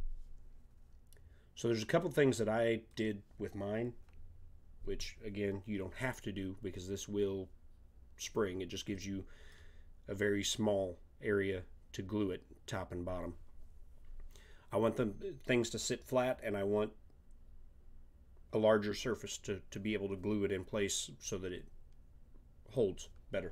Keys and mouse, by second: 1.1-5.4 middle drag, 8.9-10.5 middle drag.